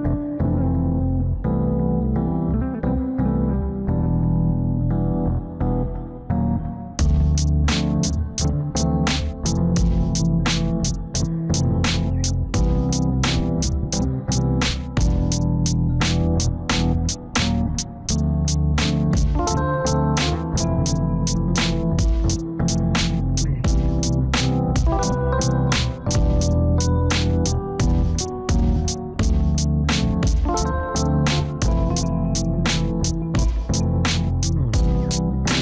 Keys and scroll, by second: 8.8 alt+w, 33.4 alt+w, 34.5 F4.